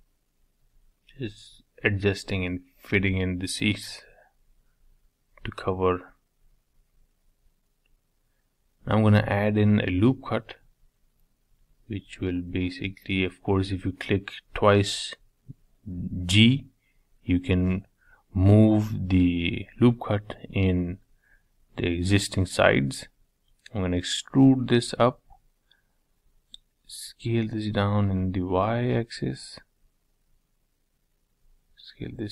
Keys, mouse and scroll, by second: 0.0-3.4 middle drag, 3.4 Tab, 4.3 ctrl+r, 7.3-8.4 middle drag, 8.4-10.1 scroll down 2, 10.1 g, 13.7 ctrl+r, 16.4 3, 16.8 click, 17.3-19.7 middle drag, 19.7 e, 21.9-23.5 middle drag, 23.5 e, 26.5-27.6 middle drag, 27.6 s, 29.6 click, 30.9 s.